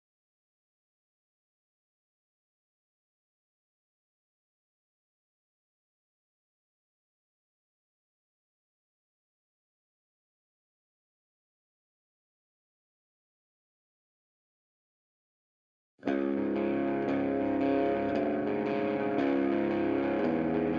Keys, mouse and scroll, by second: 1.4 scroll down 1, 3.9-4.5 scroll up 1, 5.7 scroll down 1, 6.5 scroll down 1, 7.5 scroll up 1, 10.7-11.4 scroll up 1, 12.0-12.4 scroll down 1, 14.6 scroll down 1, 17.3-20.7 drag.